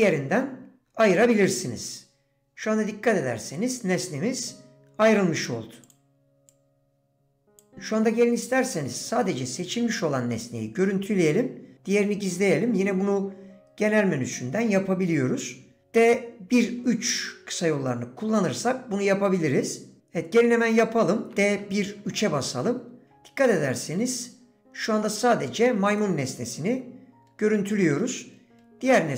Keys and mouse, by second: 1.2 click, 2.0-5.5 drag, 6.5-7.6 drag, 26.0-26.8 drag, 27.7-28.0 drag, 28.9-29.1 drag.